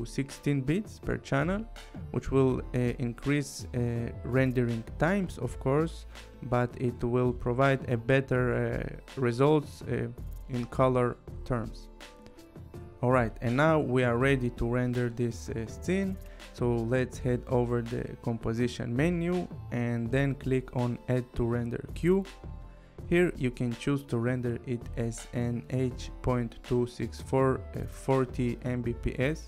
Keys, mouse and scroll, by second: 12.8 click, 15.8 click, 19.3 click, 20.9 click, 22.9 click.